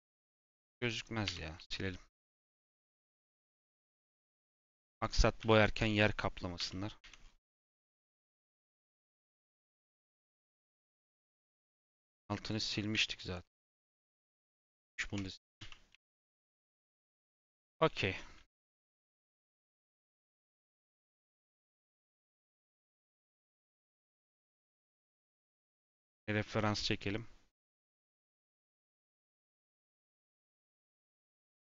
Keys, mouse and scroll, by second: 0.6 click, 1.2 /, 1.5 Tab, 1.8 middle click, 2.2 3, 3.0 click, 3.4-4.9 middle drag, 4.9 shift+click, 5.3 x, 6.5 /, 6.9 Tab, 7.1 scroll down 6, 7.3 middle click, 7.6 scroll up 5, 8.0-8.5 scroll down 6, 8.6 click, 9.0 scroll up 3, 9.5 click, 10.0 shift+click, 10.7 /, 11.4 Tab, 11.8 middle click, 12.4 click, 14.2 x, 15.5 /, 15.8 Tab, 16.6 click, 17.0-17.5 scroll down 3, 17.5-20.5 shift+middle drag.